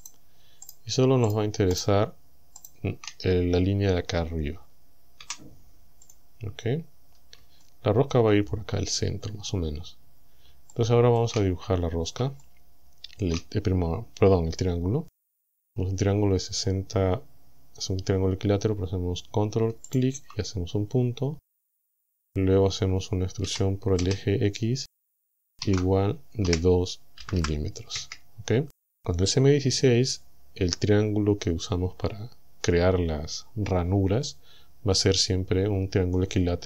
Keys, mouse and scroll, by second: 0.1 shift+right click, 0.7 shift+right click, 1.3 shift+right click, 1.8 shift+right click, 2.7 shift+right click, 5.3 Delete, 6.1 click, 6.8-7.2 scroll up 2, 7.7 shift+middle click, 10.1 scroll up 2, 10.7 shift+middle click, 11.6-12.1 shift+scroll up 3, 12.3 shift+scroll down 2, 12.4 shift+middle click, 13.3 shift+scroll up 2, 13.6-13.9 shift+scroll down 3, 19.9 ctrl+click, 23.5 e, 24.1 x, 25.7 shift+0, 26.5 KP_2, 27.3 m, 28.0 KP_Enter.